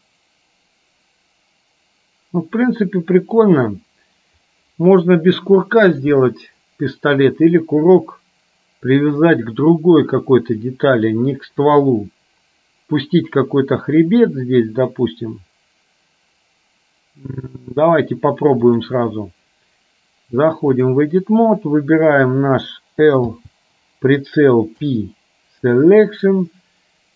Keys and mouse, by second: 18.7-21.0 drag, 23.3 l, 24.8 p.